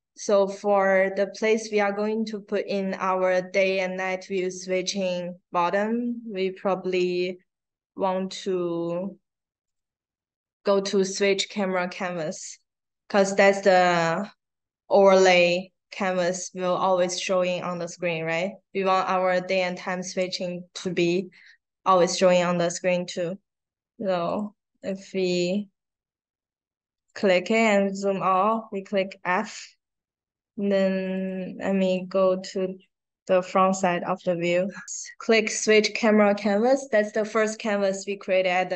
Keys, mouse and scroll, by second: 9.6 click, 10.4 click, 11.0 click, 20.0 click, 24.2 click, 24.7 click, 27.0 click, 28.2 f, 29.0 middle click, 29.5 middle click, 29.6 middle click, 31.1 click, 31.8 click, 32.9 middle click.